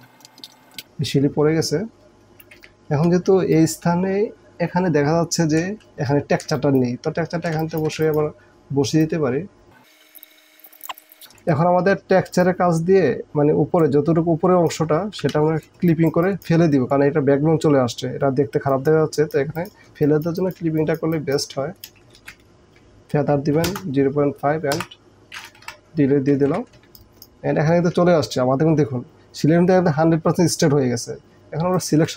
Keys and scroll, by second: 0.2 v, 0.4 Up, 0.4 Up, 0.5 Up, 0.7 Down, 2.5 s, 2.9 KP_0, 3.5 space, 6.5 alt+space, 7.6 alt+space, 10.1 space, 10.8 p, 10.9 space, 14.9 Down, 15.0 Down, 15.2 Down, 15.3 Down, 15.8 space, 20.1 space, 21.9 ctrl+Return, 22.2 ctrl+alt+d, 23.7 Return, 24.8 Delete, 25.2 ctrl+alt+z, 25.7 Delete, 26.5 ctrl+d, 26.8 space.